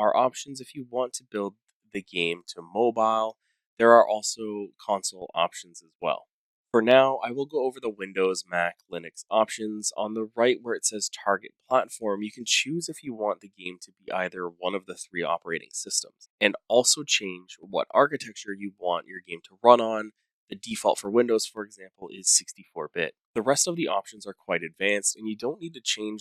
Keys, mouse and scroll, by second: 12.9 click, 18.2 click, 22.7 click.